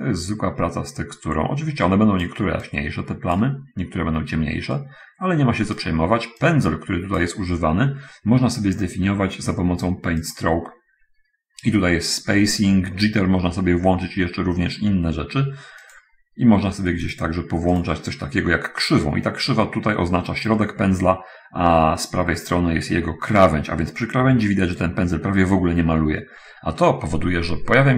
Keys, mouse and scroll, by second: 3.1 click, 5.1-6.3 right drag, 6.5-7.8 drag, 10.7 click, 16.3 click, 17.1 click, 18.1 click.